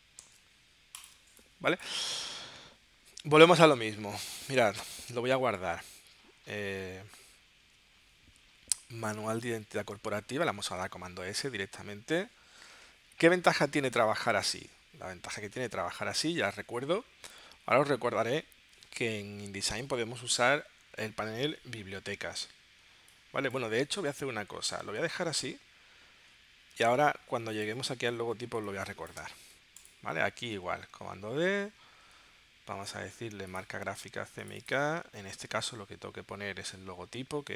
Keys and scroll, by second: 0.3 super+z, 1.1 space, 10.6 super+s, 12.8 super+Tab, 14.7 super+Tab, 26.7 super+w, 28.6 space, 31.4 super+d.